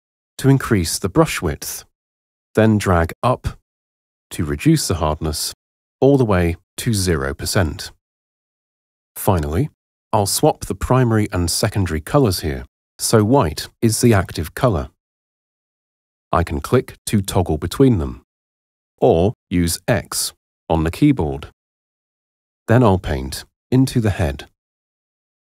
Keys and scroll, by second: 20.4 x.